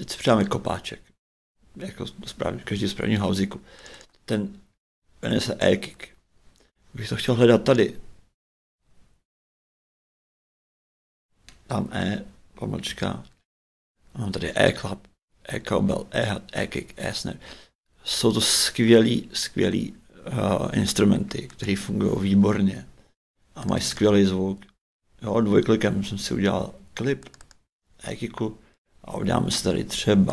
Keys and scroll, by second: 11.8 shift+e, 12.9 shift+-.